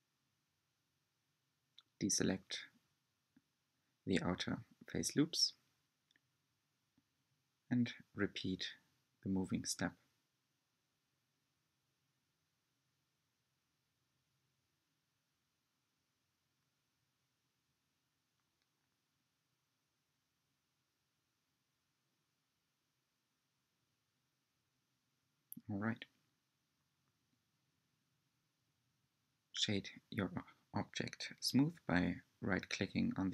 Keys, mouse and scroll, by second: 0.8 alt+shift+click, 2.2 alt+shift+click, 3.3 g, 8.7 alt+shift+click, 9.4 alt+shift+click, 10.3 g, 14.8 alt+shift+click, 15.6 alt+shift+click, 17.3 g, 24.4-25.4 scroll down 4, 25.4-28.2 shift+middle drag, 28.2-28.5 scroll down 5, 28.5-30.8 middle drag, 30.8 Tab, 31.7-33.3 middle drag.